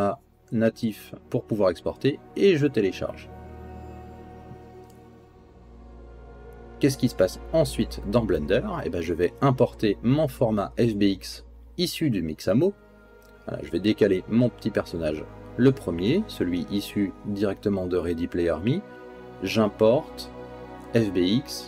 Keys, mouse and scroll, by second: 13.9 click, 15.3 g, 17.5-21.5 drag.